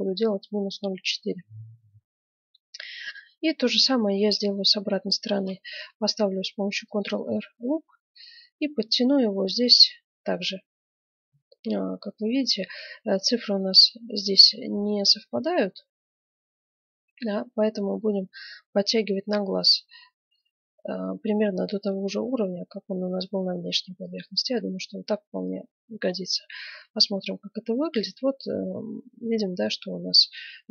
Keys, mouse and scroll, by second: 0.6-4.6 middle drag, 5.3 ctrl+r, 25.2 middle click, 25.7 Tab, 26.4-27.4 middle drag, 28.7-30.7 middle drag.